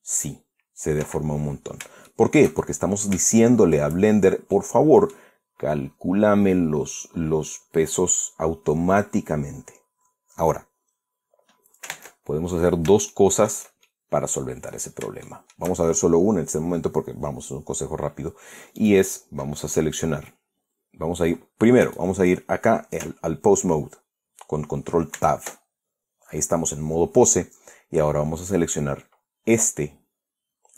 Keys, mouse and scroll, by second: 0.3 r, 1.7 Escape, 2.7-3.2 shift+right drag, 3.6 click, 3.8 shift+right drag, 4.1-4.6 shift+drag, 4.7 shift+scroll down 1, 5.2-6.0 middle drag, 12.5 ctrl+Tab, 13.7-14.3 shift+middle drag, 14.5-15.2 shift+middle drag, 15.3-15.7 scroll up 2, 15.9-16.4 shift+middle drag, 16.5 shift+scroll down 1, 19.4 click, 22.5 middle click, 25.8 ctrl+Tab, 29.1 right click.